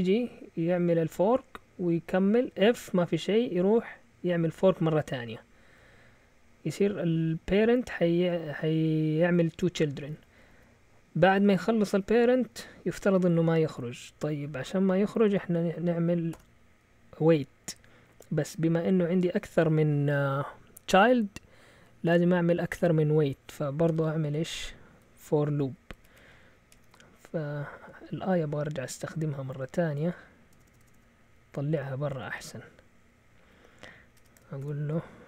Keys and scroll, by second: 2.8-3.7 typing, 4.8-5.7 typing, 10.1-10.5 typing, 16.3 o, 25.7 Up, 25.9 Up, 26.0 Up, 26.1 Up, 26.3 Up, 26.7 Up, 27.0 Right, 27.2 Right, 27.3 Right, 27.5 Right, 30.5 Delete, 30.6 Delete, 30.8 Delete, 30.9 Delete, 34.1 Escape, 34.6 typing.